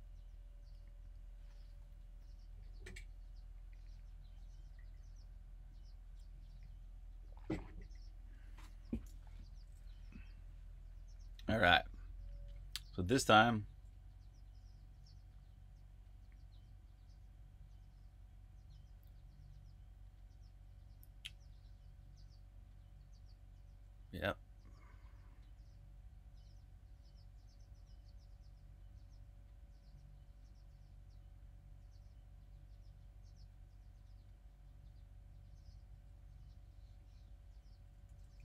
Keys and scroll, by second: 9.2-9.9 typing, 13.1 super+Tab.